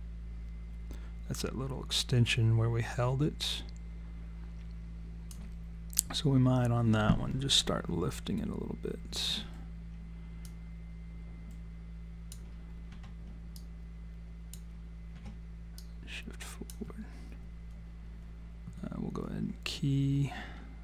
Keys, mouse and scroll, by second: 10.5 click, 12.9 w, 13.6 click, 15.1 e, 15.8 click.